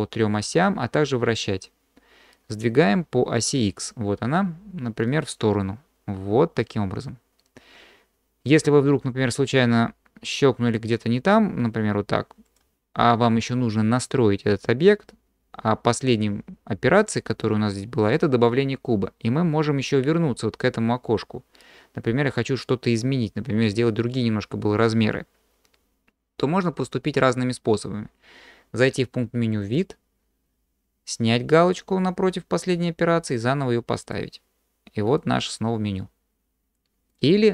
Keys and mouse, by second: 5.1-8.5 drag, 29.6-32.7 drag, 33.3-34.1 drag, 35.2-36.8 drag, 37.1 drag.